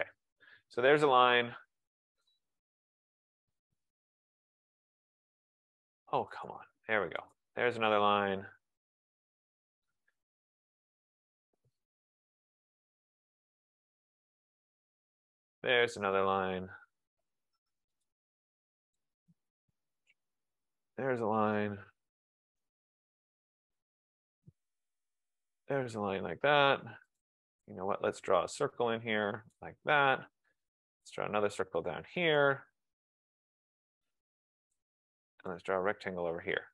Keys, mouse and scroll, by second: 2.3 click, 3.1 click, 4.5 click, 6.6 click, 7.4 click, 8.0 click, 9.6 click, 10.1 click, 11.0 click, 12.6 click, 14.1 click, 15.3 click, 16.6 click, 18.3 click, 20.1 click, 20.9 click, 22.7 click, 23.4 click, 24.3 click, 25.6 click, 27.3 click, 29.6 click.